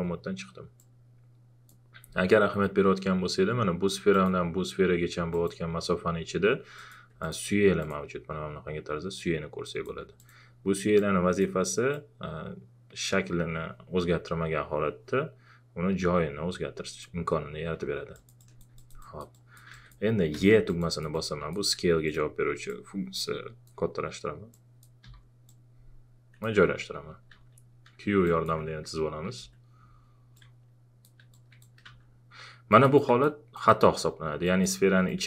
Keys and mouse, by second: 0.8-3.9 drag, 4.1 click, 10.2-17.8 drag, 17.8 e, 18.1 alt+click, 19.0 alt+click, 20.3 e, 20.7-24.5 alt+drag, 25.0 w, 25.5-27.3 drag, 27.3 q, 28.2 click, 29.4 x, 30.4 click, 31.3 click, 32.9 click.